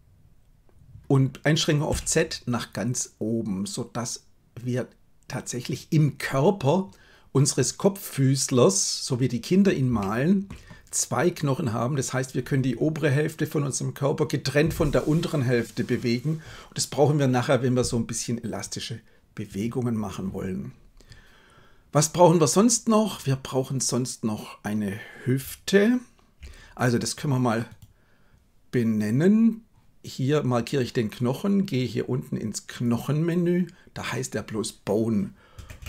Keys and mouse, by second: 9.9 shift+middle click, 32.6 click, 34.1-35.8 drag, 35.7 BackSpace.